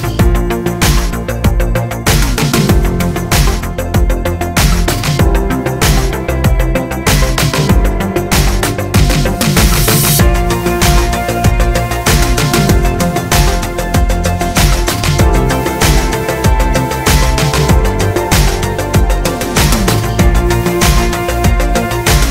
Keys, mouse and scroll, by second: 1.1 middle click, 1.9 click, 3.1 alt+m, 4.2 click, 4.6 KP_7, 6.6 s, 9.1 shift+middle click, 9.5 click, 9.8 s, 11.7 s, 12.3 click, 13.1-15.0 middle drag, 13.8 KP_7, 14.6 scroll down 1, 15.0 click, 15.6 s, 17.7-19.5 drag, 18.3 s, 20.0 s, 21.9 scroll down 1.